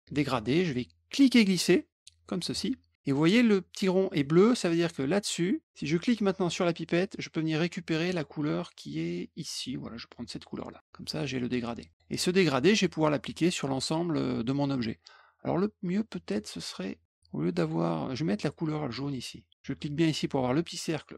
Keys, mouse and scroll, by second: 0.0 click, 2.2 ctrl+click, 6.5 click, 10.4 click, 11.9 click, 17.5 click.